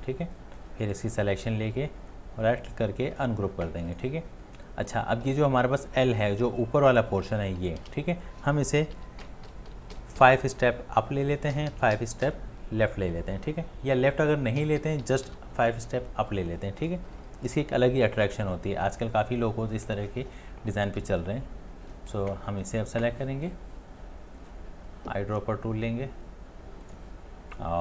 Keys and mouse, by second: 1.4 right click, 7.6 right click, 7.8 ctrl+z, 9.0 Up, 9.2 Up, 9.5 Up, 9.7 Up, 9.9 Up, 11.5 Left, 12.0 Left, 12.3 Left, 14.6 Right, 14.8 Right, 15.0 Right, 15.3 Right.